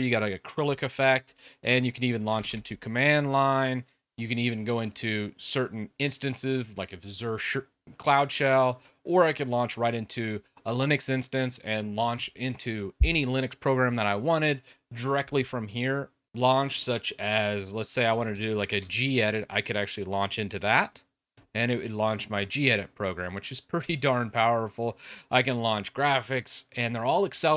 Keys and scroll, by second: 1.9-2.8 typing, 7.6 typing, 17.5-18.7 typing, 23.8 typing.